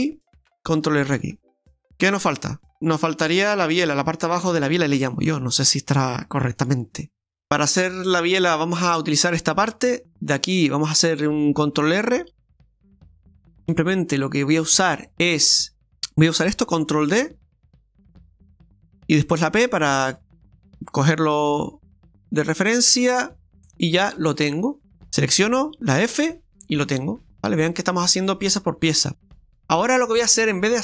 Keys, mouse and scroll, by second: 0.4 ctrl+r, 0.4 ctrl+z, 1.1 ctrl+r, 4.1-6.5 scroll down 3, 6.5 scroll down 2, 6.8 middle click, 7.1 Delete, 7.4 middle click, 8.9 right click, 9.7 Tab, 10.1 middle click, 10.7-11.9 scroll up 5, 12.3 ctrl+r, 13.6 shift+middle click, 17.3 ctrl+d, 18.0 click, 19.6 p, 21.6 Tab, 22.5 right click, 23.0 right click, 23.8 right click, 24.2 right click, 24.6 right click, 24.8 middle click, 25.1 a, 26.0 a, 26.6 middle click, 26.6 f, 26.8 middle click, 29.2 middle click.